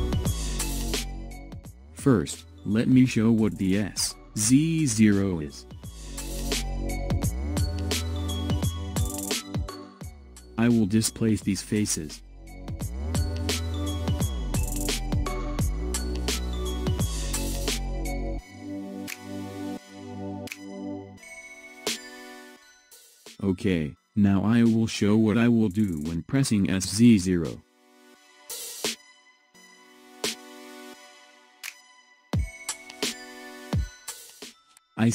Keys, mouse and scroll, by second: 2.0 click, 3.3-6.3 middle drag, 8.1 click, 9.8 click, 10.5 click, 11.5 click, 12.0 click, 12.4 click, 12.6 click, 12.7 click, 13.0 click, 13.1 click, 13.5 click, 13.7 click, 13.9 click, 14.1 click, 14.2 click, 14.5 click, 14.6 click, 14.9 middle click, 15.4 click, 15.5 click, 15.8 click, 16.1 click, 16.4 click, 16.6 click, 16.9 click, 17.0 click, 17.3 click, 17.5 click, 17.7 click, 18.1 click, 18.2 middle click, 18.5 click, 18.7 click, 18.8 middle click, 19.2 click, 19.5 click, 19.9 click, 20.0 click, 20.3 click, 20.4 click, 20.6 click, 20.9 click, 21.1 click, 21.3 click, 21.5 click, 21.7 click, 21.9-24.0 middle drag, 24.0 click, 25.1-31.0 middle drag, 32.0 click.